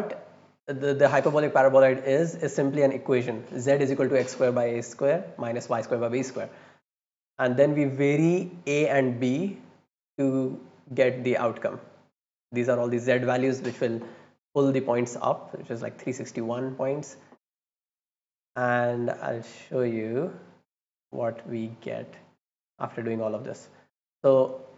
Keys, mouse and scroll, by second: 0.0 click, 2.5 click, 9.3 click, 15.9-16.8 drag, 17.1 right click, 18.2-19.5 drag, 19.9 middle click, 19.9 scroll down 1, 20.3 middle click, 20.3 scroll up 1, 21.0 right click, 21.7 middle click, 21.7 scroll down 1, 22.4 right click, 23.6 click, 24.1 click.